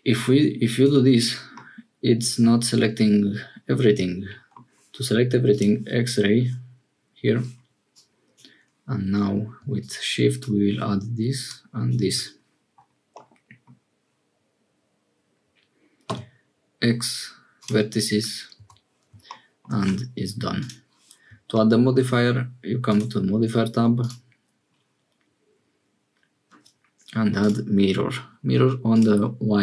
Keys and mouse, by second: 1.5-4.6 middle drag, 5.5-8.4 drag, 13.1 right click, 16.0 x, 18.5 Tab, 20.5 click, 21.7 shift+click, 22.8 click, 23.9-27.4 drag, 28.9 click.